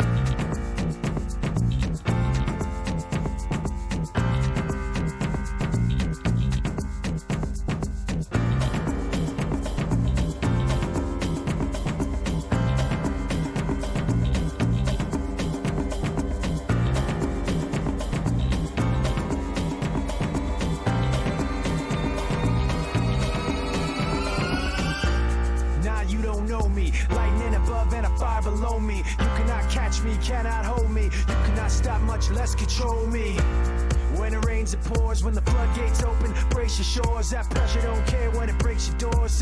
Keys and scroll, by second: 0.0-0.8 typing, 3.9 d, 20.1-21.5 typing, 33.7-35.5 typing, 35.7 Return.